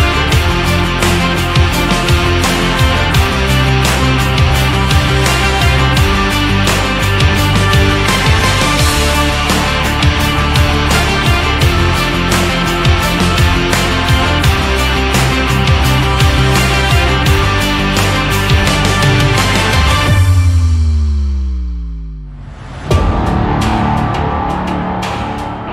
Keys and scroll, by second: 22.2 shift+x.